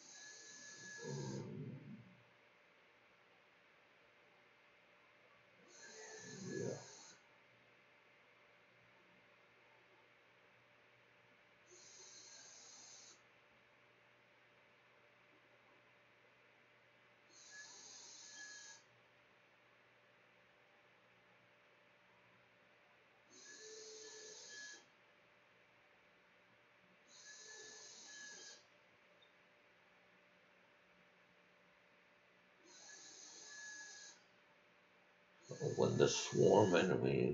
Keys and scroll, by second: 17.2-18.5 typing, 19.3 Return, 19.8-21.4 typing, 22.6-27.1 typing.